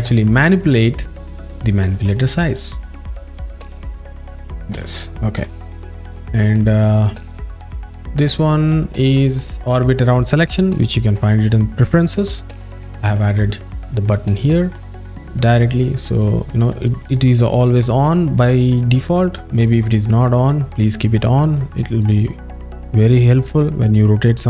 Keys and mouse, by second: 3.1-4.6 drag, 4.8 z, 6.4 click, 6.7 shift+click, 7.0 shift+click, 15.8 click, 19.1 alt+shift+middle click, 22.0 click, 23.0 middle click, 23.8 middle click.